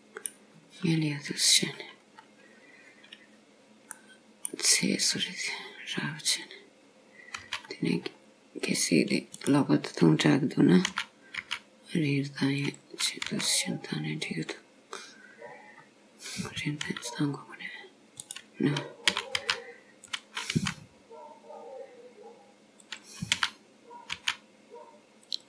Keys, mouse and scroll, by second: 0.6-1.3 scroll up 1, 1.3 click, 1.3 scroll up 1, 2.2 scroll down 2, 4.0 middle click, 5.7 scroll up 2, 6.4 click, 7.5 c, 10.9 s, 13.3 g, 15.8 scroll down 3, 16.9 s, 19.1 s, 20.7 g, 23.4 s.